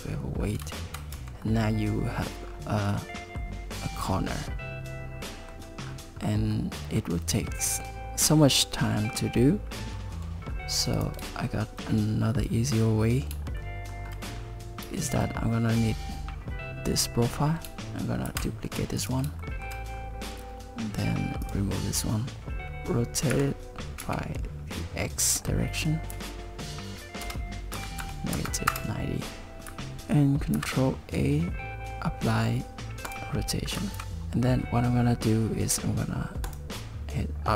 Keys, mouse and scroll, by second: 0.4 scroll up 3, 0.8 shift+middle click, 1.1 Tab, 1.4 middle click, 2.4-2.9 scroll down 3, 2.9 middle click, 3.7 scroll up 4, 4.1 middle click, 5.8-6.5 scroll down 5, 6.5 middle click, 10.4-11.0 scroll down 2, 11.0 click, 11.5 shift+middle click, 13.6 shift+middle click, 14.3 scroll up 5, 15.1 shift+click, 18.3 shift+d, 19.4 shift+middle click, 19.9-21.4 scroll up 3, 21.4 click, 22.5 alt+r, 23.3 r, 30.6 ctrl+a, 34.0 ctrl+a, 36.5 click.